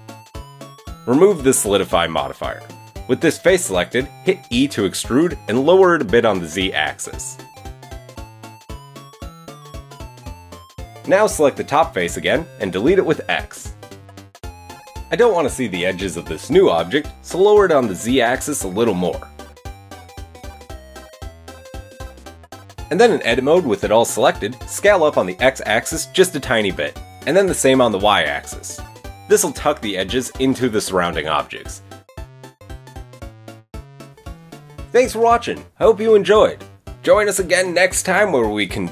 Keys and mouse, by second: 5.2 e, 6.1 g, 9.5-11.5 middle drag, 10.4 KP_1, 12.0-16.5 middle drag, 13.2 x, 14.9 a, 16.2 Tab, 16.5 click, 16.6-18.1 middle drag, 18.7 Tab, 18.7-20.8 middle drag, 20.8 Tab, 21.2 g, 22.0 KP_7, 22.9 Tab, 26.5 s, 29.4 s, 31.2 Tab, 31.6 click, 31.9-37.6 middle drag, 37.6-37.9 drag, 37.9-38.9 middle drag.